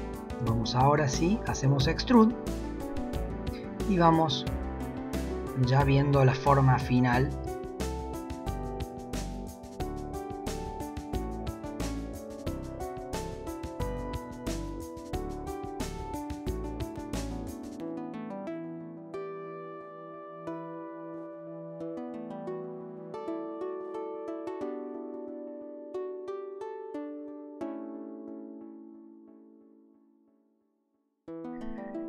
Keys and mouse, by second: 0.4 e, 3.7 e, 6.4 shift+middle click, 7.4 e, 9.6 e, 10.1 e, 12.7 shift+middle click, 13.2 g, 13.9 click, 14.1 g, 14.6 shift+middle click, 15.0 e, 15.5 shift+middle click, 18.3 shift+middle click, 18.7 shift+middle click, 18.9 e, 20.3 e, 20.7 e, 22.6 g, 24.1 click, 24.3 g, 24.8 shift+middle click, 25.0 e, 25.4 e, 26.5 g, 26.8 shift+middle click, 27.1 e, 27.6 e, 29.3 shift+middle click, 29.6 click, 29.7 g, 30.1 middle click, 30.3 click, 30.5 g, 31.1 shift+middle click, 31.3 shift+middle click.